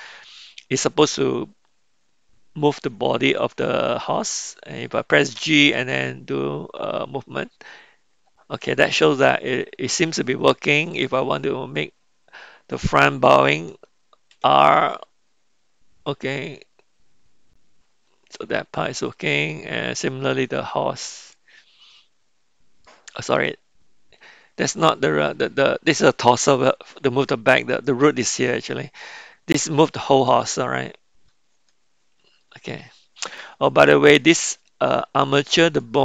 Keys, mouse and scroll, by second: 5.3 g, 10.9 click, 14.3 r, 22.8 middle click, 25.3 click, 27.7 click, 30.3 g, 33.9-34.5 middle drag, 35.7 click.